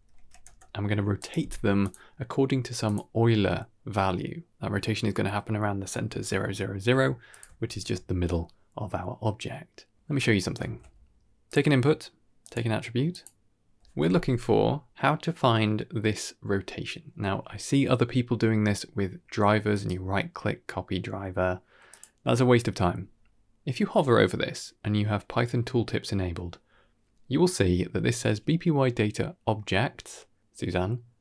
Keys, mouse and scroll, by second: 0.1 Down, 1.7-2.9 drag, 5.8-6.2 middle drag, 6.3-6.7 ctrl+middle drag, 6.8 ctrl+middle click, 7.2 click, 7.6 ctrl+h, 10.1 middle click, 10.6 shift+a, 14.3 n, 19.6 right click, 21.8 click, 23.4-24.9 scroll up 4.